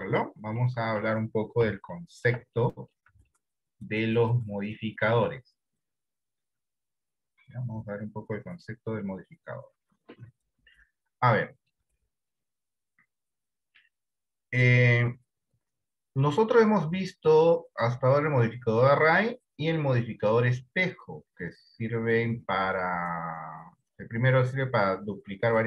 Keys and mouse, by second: 1.0 middle click, 2.1 shift+middle click, 3.0 middle click, 3.6-5.2 shift+middle drag, 12.1 middle click, 16.4 click, 17.4-25.6 drag.